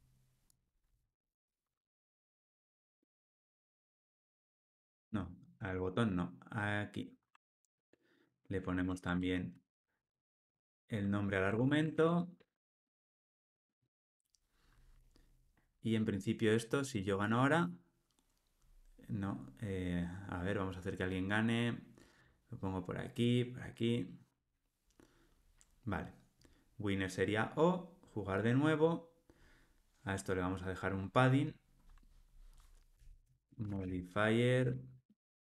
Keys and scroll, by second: 1.0 super+v, 2.4 alt+super+l, 5.0 super+z, 5.6 super+z, 7.3 super+v, 11.5 alt+super+l, 11.8 ctrl+alt+o, 34.6 Return.